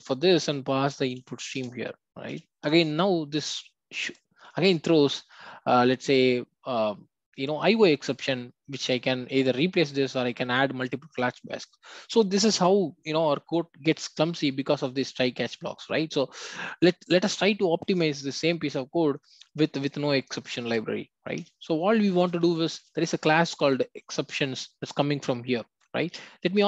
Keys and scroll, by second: 4.4 alt+Return.